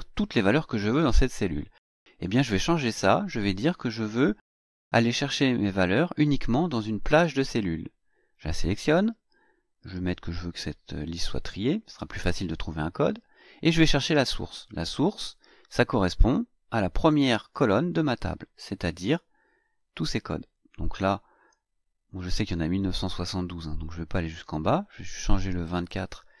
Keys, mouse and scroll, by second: 2.9 click, 7.3 click, 9.7 click, 14.4 click, 17.4 click, 19.8-22.4 drag, 24.2 click, 25.6 BackSpace.